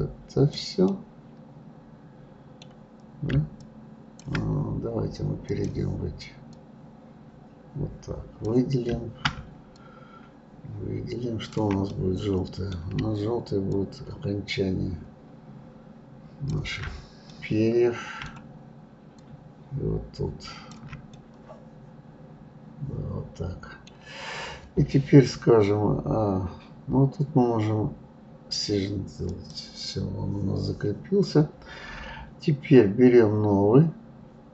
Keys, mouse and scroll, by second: 0.8-3.6 middle drag, 3.6-5.6 ctrl+drag, 6.5-9.5 drag, 9.7-11.9 shift+drag, 11.9-13.7 middle drag, 13.7-16.7 shift+drag, 17.3-19.2 middle drag, 19.2-21.1 shift+drag, 21.1-24.1 middle drag, 29.3 click.